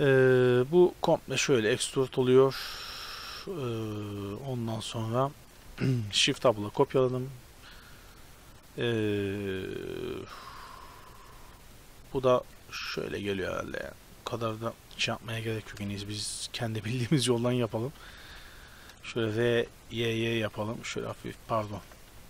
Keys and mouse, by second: 0.7 e, 6.4 ctrl+l, 10.5 middle click, 10.7 middle click, 12.7 shift+d, 15.7 g, 17.9 r, 19.2 e, 21.7 ctrl+z, 22.1 g.